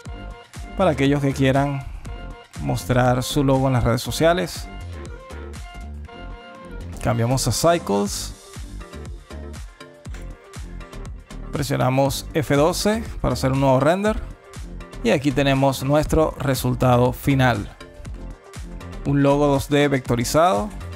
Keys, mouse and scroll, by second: 3.2 space, 4.2 click, 9.0 space, 10.8 click.